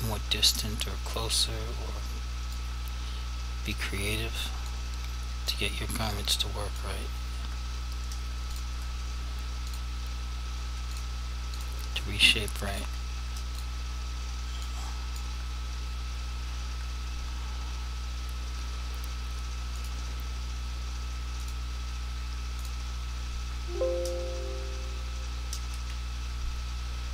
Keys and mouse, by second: 1.5 click, 4.8 click, 6.3 click, 8.6 click, 9.8 shift+click, 12.8 shift+click, 13.6 click, 14.8 click, 19.9 click.